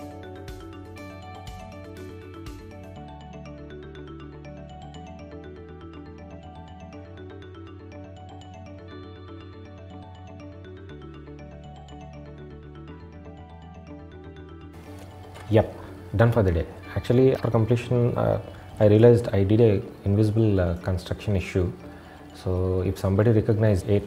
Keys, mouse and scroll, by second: 0.2-1.1 scroll down 1, 1.1 click, 1.8 shift+middle click, 2.5 middle click.